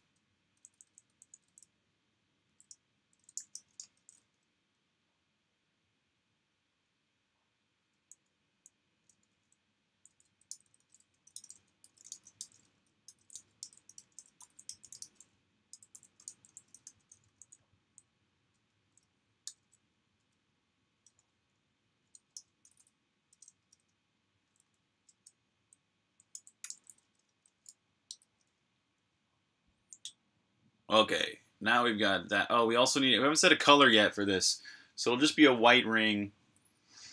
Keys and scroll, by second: 0.0-0.8 typing, 2.0-4.4 typing, 7.5-11.8 typing, 19.0-24.3 typing, 25.9-26.6 typing, 28.0-28.8 typing, 29.1 super+h, 32.9 typing.